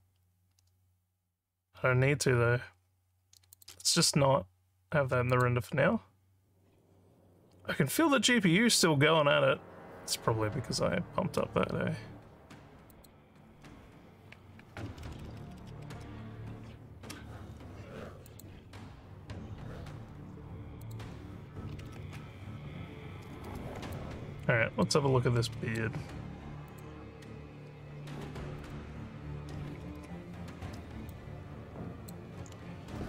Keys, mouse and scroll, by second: 3.5 click, 5.4 click, 10.9 scroll down 1, 12.9 click, 18.3 click, 20.8 click, 23.9 alt+click, 25.3 alt+middle click, 26.7 click, 28.6 click, 31.1 alt+click, 32.7 z.